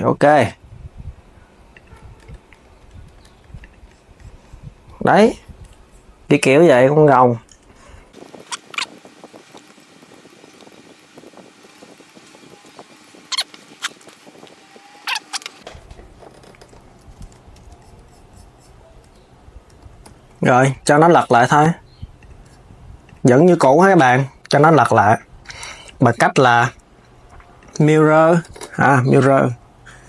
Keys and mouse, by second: 0.1 click, 0.4 alt+s, 1.5 alt+s, 1.9 Tab, 2.4 KP_1, 3.0 s, 3.2 s, 3.3 click, 4.5 KP_3, 8.3 click, 8.4 Tab, 8.5 click, 9.0 alt+s, 9.4 alt+s, 9.5 g, 9.7 click, 9.8 alt+s, 10.0 alt+s, 10.3 alt+s, 10.5 alt+s, 10.6 g, 11.2 click, 11.3 alt+s, 11.6 alt+s, 11.9 click, 12.1 alt+s, 12.4 alt+s, 12.6 click, 12.7 g, 13.3 click, 14.0 click, 14.4-15.3 typing, 14.9 click, 15.2 Tab, 15.2 click, 17.3 KP_1, 18.8 Tab, 19.4 Tab, 19.8 s, 20.1 s, 20.4 click, 21.9 click, 22.8-25.8 drag, 28.3 KP_3, 29.0 KP_1.